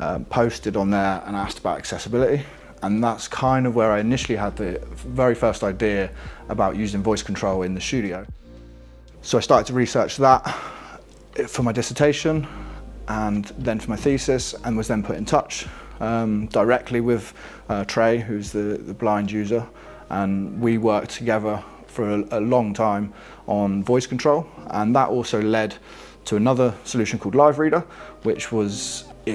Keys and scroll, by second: 26.5 alt+Left, 27.6 alt+Down, 28.6 alt+Right.